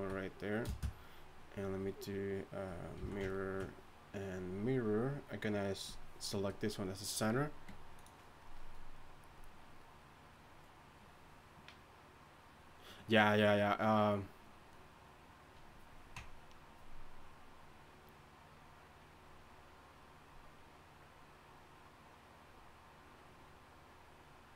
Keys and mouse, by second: 0.6 space, 3.0 z.